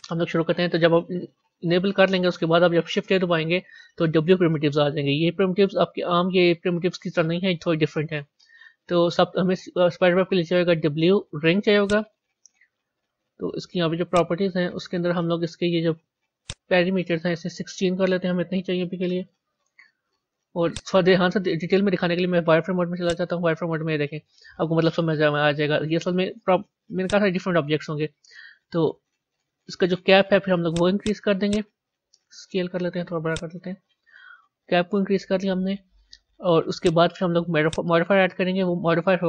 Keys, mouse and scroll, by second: 3.1 shift+a, 12.6-13.0 scroll up 4, 20.6 click, 22.3 z, 23.5-26.5 scroll up 4, 26.9 click, 27.8-30.6 scroll down 9, 30.6 click, 32.5 s, 36.7 click, 37.6-39.2 drag.